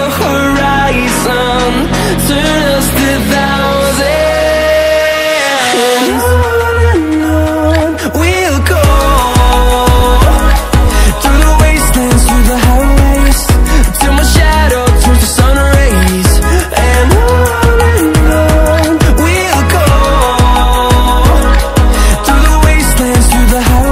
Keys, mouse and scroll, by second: 3.7 ctrl+alt+scroll up 1, 5.0 scroll down 1, 5.7 ctrl+alt+scroll up 2, 6.7 click, 8.1-23.1 alt+shift+drag.